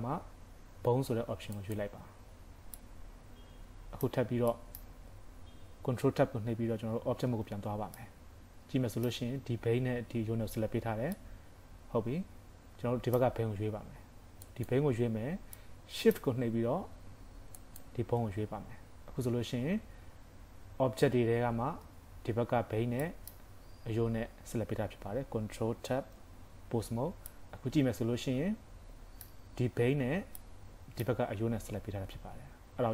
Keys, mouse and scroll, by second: 2.2 scroll down 5, 2.8 middle click, 2.8-3.1 scroll down 3, 4.5 middle click, 5.0-6.4 scroll up 1, 6.4 scroll up 1, 7.4 ctrl+Tab, 7.9 middle click, 11.1 middle click, 14.5 click, 15.6 middle click, 17.6 shift+click, 18.7-19.6 scroll up 1, 19.7 scroll down 4, 23.1 middle click, 23.1-24.0 scroll up 5, 26.0 ctrl+Tab, 27.3 middle click, 30.4 middle click.